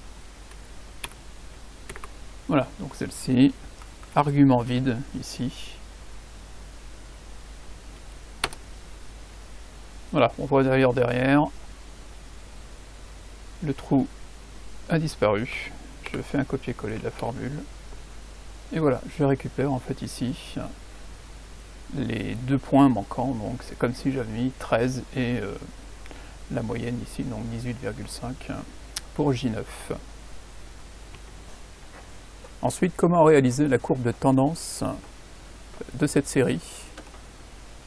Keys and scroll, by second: 1.0 shift+n, 1.8 shift+a, 4.1 5, 4.6 [, 8.4 Return, 16.0 ctrl+c, 17.2 ctrl+v, 31.2 F9.